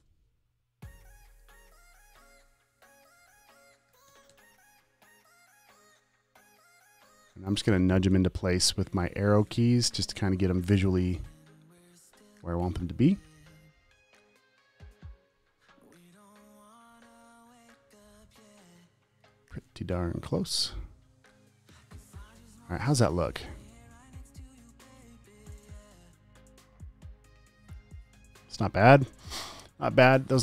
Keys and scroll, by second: 0.0 6, 4.1 super+a, 4.3 6, 7.9 Up, 9.4 Right, 9.6 Left, 10.1 Right, 12.8 Up, 20.3 Up, 20.6 Left, 23.0 space, 24.8 space, 25.2 space, 25.7 alt+super+space.